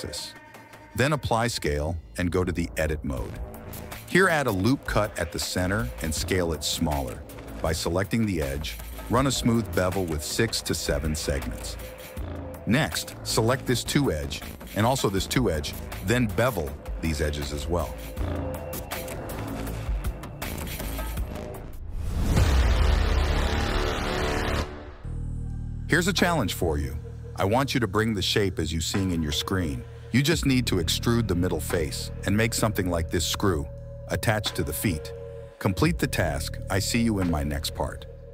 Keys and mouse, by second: 1.2 g, 2.7 ctrl+a, 3.6 ctrl+r, 3.9 Tab, 4.2 ctrl+r, 5.6 s, 6.8 ctrl+b, 10.2 right click, 11.0 right click, 11.1 s, 12.6 ctrl+z, 13.9 click, 14.6 click, 15.2 click, 15.6 shift+click, 16.1 shift+click, 17.2 shift+click, 17.4 KP_1, 17.8 ctrl+b, 20.3 click, 21.3 KP_1, 22.0 Tab, 25.0 Tab.